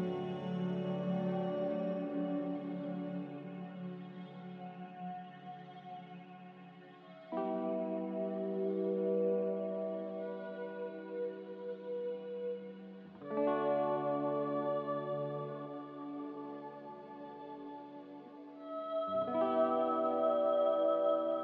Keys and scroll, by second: 5.4 ctrl+c, 5.6 ctrl+v.